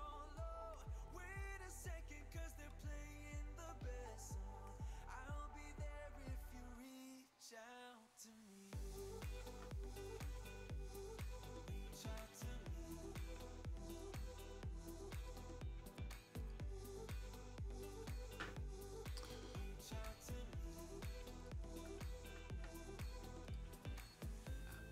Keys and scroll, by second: 0.7 super+z, 1.8 super+z, 3.5 v, 3.9 super+z, 5.1 super+z, 6.2 super+v, 8.9 t, 23.5 super+c.